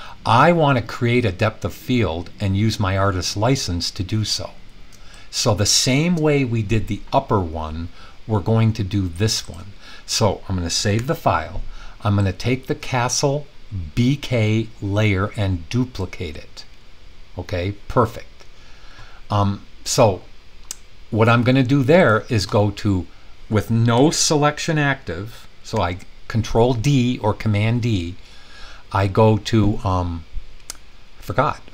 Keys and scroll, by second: 10.9 super+s, 25.7 super+d.